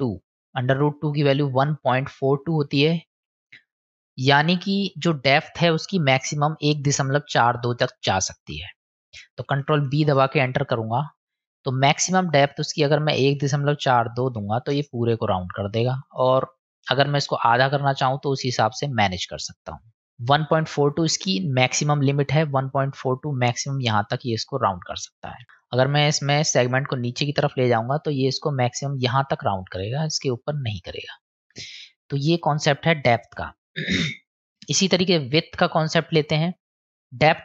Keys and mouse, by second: 2.9 middle click, 9.7 ctrl+b, 11.7-15.4 drag, 17.8-22.1 drag, 26.8-32.3 drag, 34.2-36.2 drag, 37.0 ctrl+z, 37.0 middle click.